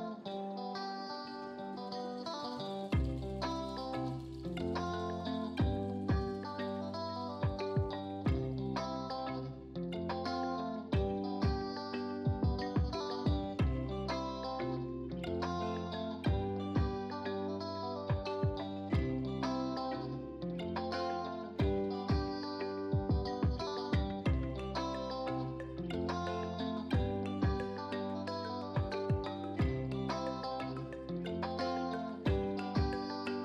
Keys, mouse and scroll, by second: 4.7 click, 13.2-17.2 scroll down 1, 17.5-18.0 scroll down 1, 22.9 scroll up 1, 30.5-33.4 scroll down 1.